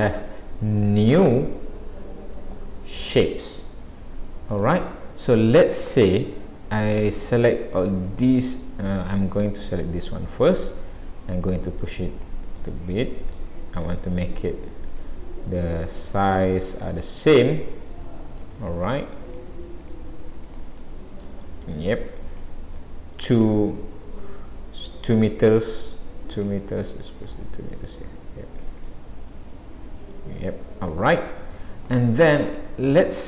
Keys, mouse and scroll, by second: 1.6 middle click, 6.9 click, 8.1 click, 9.7 click, 10.5 click, 11.5 click, 12.6 middle click, 13.9 middle click, 14.9 click, 15.6 click, 17.0 middle click, 17.8 middle click, 19.3 click, 19.8 click, 20.5 click, 20.8 middle click, 21.7 click, 26.5 click, 27.4 click, 28.9 middle click, 32.0 middle click.